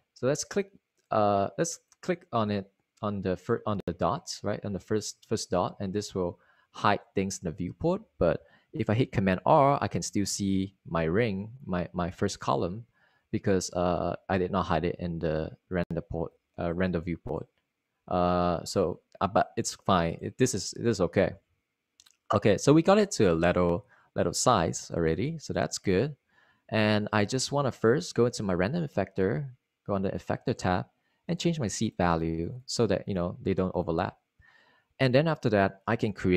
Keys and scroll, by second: 10.0 super+r.